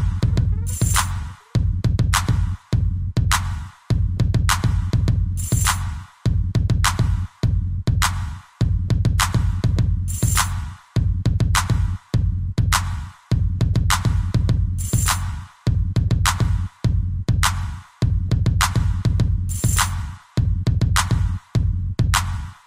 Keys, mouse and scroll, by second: 0.5 click, 1.1 shift+middle click, 2.3 click, 2.8 scroll up 3, 3.3 shift+middle click, 3.5 middle click, 3.6-4.0 scroll up 2, 4.0 shift+middle click, 4.2 middle click, 4.3 scroll up 2, 6.4 a, 6.7 middle click, 7.9 c, 8.3 click, 9.9 Escape, 10.2-10.6 scroll down 3, 11.8 click, 13.8-14.3 scroll down 3, 14.3 middle click, 14.7 shift+middle click, 15.3 middle click, 18.6 ctrl+c, 20.0 scroll up 3, 21.1 shift+click, 22.0 scroll up 1.